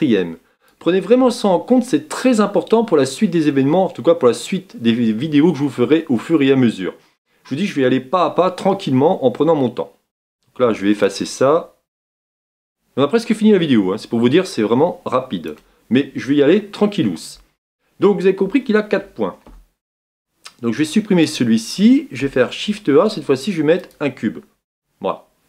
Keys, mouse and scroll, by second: 20.7 Tab, 21.3 x, 23.9 shift+a, 24.7-25.4 middle drag.